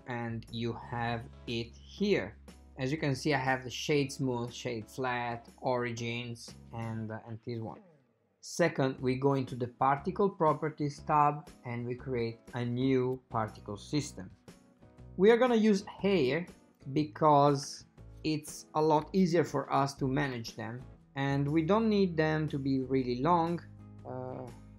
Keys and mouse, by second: 13.5 click, 19.4 ctrl+middle click, 21.3-24.7 drag.